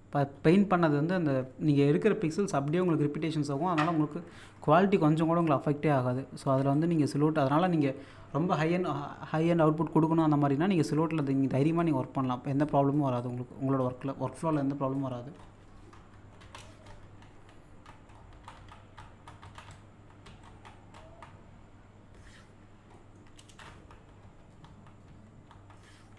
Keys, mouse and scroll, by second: 2.5 scroll down 1, 2.5 middle click, 2.8-3.6 scroll up 1, 4.3-5.2 ctrl+scroll up 2, 5.4-7.9 shift+drag, 7.9-8.5 scroll down 1, 10.8-15.2 drag, 15.2-16.2 scroll down 1, 17.1-17.9 scroll down 1, 18.1-18.9 scroll up 1, 22.5-22.9 scroll up 1, 23.0 middle click.